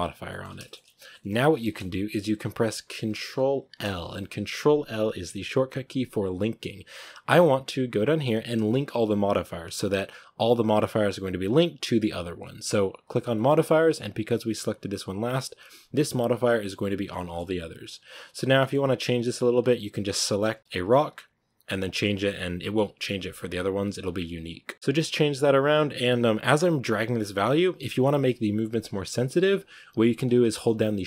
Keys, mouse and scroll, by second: 0.7-1.0 scroll down 1, 1.0 shift+middle click, 1.2 scroll up 2, 1.4 shift+middle click, 1.8-3.7 scroll down 1, 14.0-14.3 scroll up 2, 14.8-15.3 scroll down 1, 17.0-18.0 shift+middle drag, 18.0 right drag, 18.2 scroll up 2, 18.4-19.8 middle drag, 19.8 shift+click, 20.6 shift+middle click, 21.2 right click, 22.0-24.7 drag, 24.7-26.4 shift+middle drag, 26.4-31.0 drag.